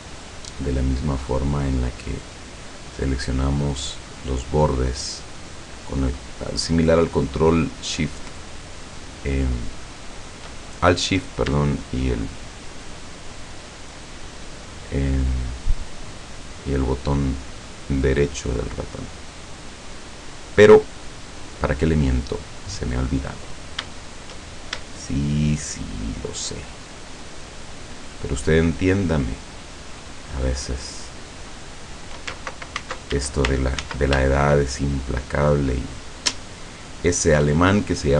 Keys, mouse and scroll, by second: 0.2 shift+right click, 0.7 shift+right click, 1.3 shift+right click, 2.2 shift+right click, 3.0 shift+right click, 4.2 shift+right click, 5.0 shift+right click, 6.0 shift+right click, 6.8 shift+right click, 7.4 shift+right click, 8.4 shift+right click, 8.9 shift+right click, 9.4 shift+right click, 11.9 shift+right click, 12.5 shift+right click, 13.1 shift+right click, 13.8 shift+right click, 14.8 shift+right click, 15.3 shift+middle click, 16.8 shift+right click, 17.6 shift+right click, 18.4 shift+right click, 19.5 shift+right click, 20.3 shift+right click, 21.1 shift+scroll down 3, 21.6-23.3 middle drag, 23.4 scroll up 2, 24.4 shift+scroll up 2, 24.9-27.1 shift+middle drag, 27.4 shift+right click, 28.0 shift+right click, 28.5 shift+right click, 29.2 shift+right click, 29.8 shift+right click, 30.7 shift+right click, 31.5 shift+right click, 34.2 ctrl+shift+z, 34.4 ctrl+shift+click, 35.4 shift+click, 36.1 shift+click, 37.2 shift+click, 37.9 shift+scroll down 3.